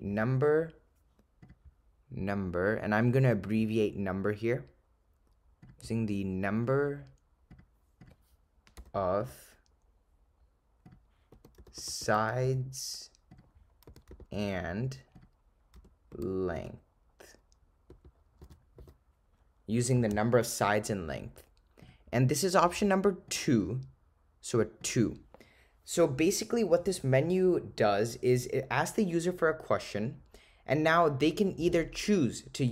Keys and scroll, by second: 0.2 7, 2.9 ., 6.6 0, 8.8 7, 10.9 0, 13.4 0, 15.2 0, 15.8 ), 18.5 4, 18.8 ^, 23.3 ,, 24.9 2.